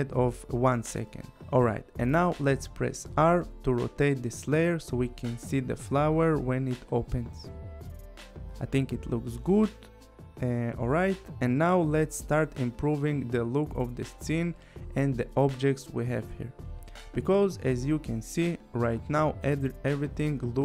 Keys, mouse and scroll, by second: 2.5 click, 3.5 r, 5.1 click, 11.9 click, 13.1 click, 16.1 click, 17.5-17.9 scroll, 17.9 click, 18.3 scroll, 18.8 click, 19.0-19.5 scroll, 19.4 click, 19.9 click, 20.2 click, 20.4 click.